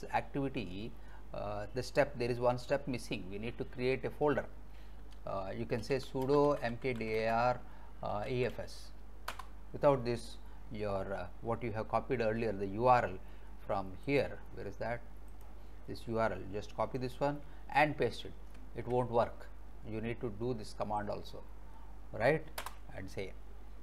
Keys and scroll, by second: 3.9 alt+Tab, 5.4-9.1 typing, 9.3 Return, 18.6 alt+Tab, 22.6 Return.